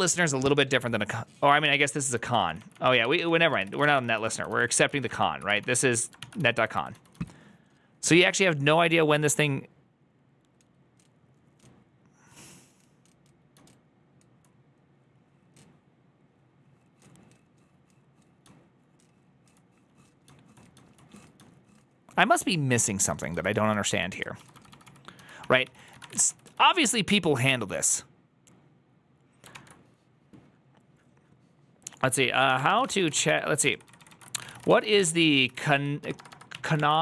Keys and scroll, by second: 3.2-6.8 typing, 9.7 typing, 13.7-14.4 j, 18.5-19.5 j, 20.5 j, 20.8 j, 23.7-27.5 typing, 25.5 ctrl+c, 25.6 ctrl+c, 29.4 j, 32.9-37.0 typing.